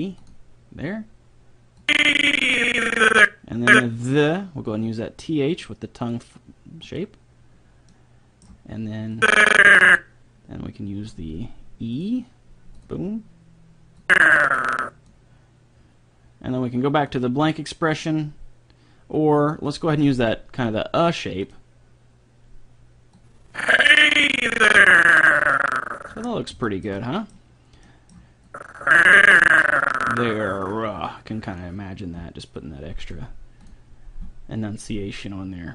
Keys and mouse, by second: 0.3-3.5 drag, 4.7-8.5 drag, 7.9 middle click, 7.9 right click, 9.3-10.9 drag, 9.3 middle click, 9.3 right click, 11.9-15.7 drag, 17.1-23.1 drag, 23.3-24.9 drag, 26.3-28.5 middle drag, 28.5-30.1 drag, 32.6-35.5 drag.